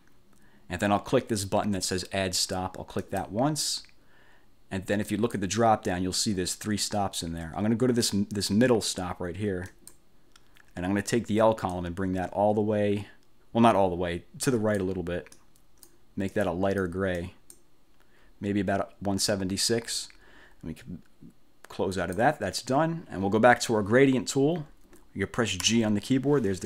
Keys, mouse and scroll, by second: 3.1 click, 5.2 click, 9.8 click, 11.8-15.1 drag, 15.5 click, 16.4 click, 17.3 click, 22.1 click, 25.8 g.